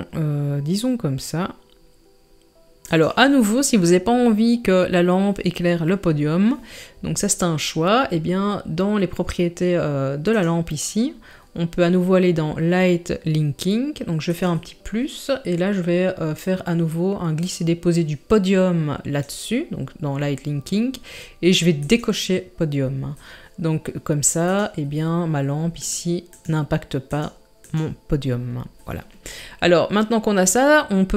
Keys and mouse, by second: 10.3 click, 17.4-17.9 drag, 21.9 click, 24.5 click, 25.8 click, 26.3 click, 27.1 click, 27.6 click.